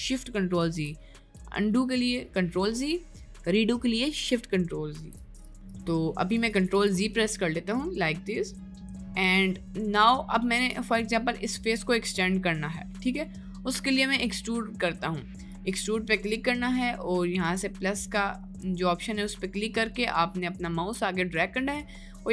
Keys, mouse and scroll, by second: 0.8 ctrl+shift+z, 2.7 ctrl+z, 5.0 ctrl+z, 5.7 right click, 6.2 middle click, 6.6 ctrl+z, 7.6 middle click, 8.3 middle click, 9.7 middle click, 10.1 middle click, 11.1 middle click, 13.2 middle click, 17.3-22.3 drag.